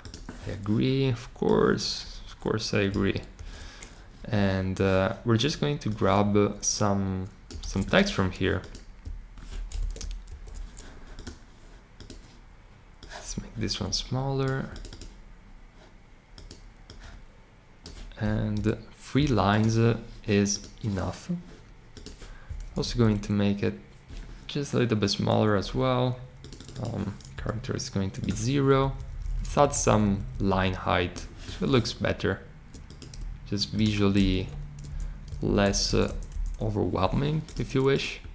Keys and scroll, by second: 3.3 super+c, 7.6 super+c, 9.7 Return, 10.2 super+v, 18.5 ., 22.7 Down, 22.8 Down, 27.3 0, 28.8 Up, 29.1 Up, 29.2 Up, 29.3 Up, 29.4 Up, 29.9 Up, 30.1 Up, 30.3 Up, 30.4 Up, 34.4 shift+Right, 35.3 Right, 35.6 Left, 36.0 Left, 36.3 Left.